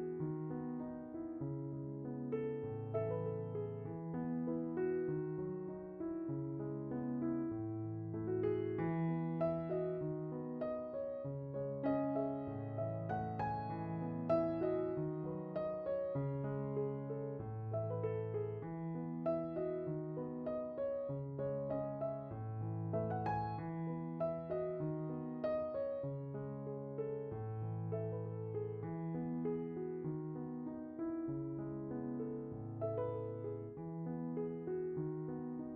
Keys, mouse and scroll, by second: 3.3 click, 5.3-6.4 drag, 8.2 click, 10.2-11.2 middle drag, 11.4 click, 12.7-13.7 drag, 15.0 click, 16.1 drag, 17.0-19.8 middle drag, 20.1-20.9 middle drag, 21.8-23.4 middle drag, 23.6 click, 23.9 click, 24.5 shift+d, 26.5 middle click, 26.6-27.7 scroll down 1, 27.9-28.9 drag, 29.0 click, 30.1 middle click, 31.4 click, 33.3 click, 34.9 middle drag, 35.1-35.5 scroll up 2, 35.1 middle click.